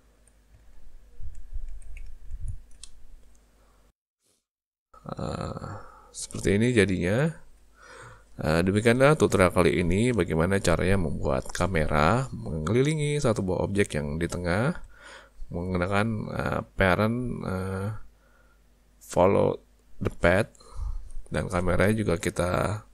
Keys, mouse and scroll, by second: 0.0 ctrl+scroll down 1, 0.6-2.1 ctrl+scroll down 4, 2.1 ctrl+scroll down 1, 2.8 shift+middle click.